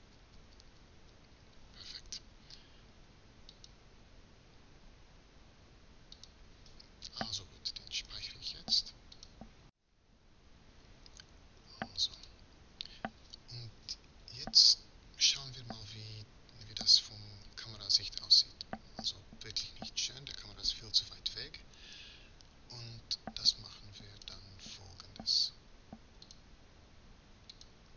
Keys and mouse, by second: 0.1 Left, 7.6 ctrl+s, 17.5 KP_0.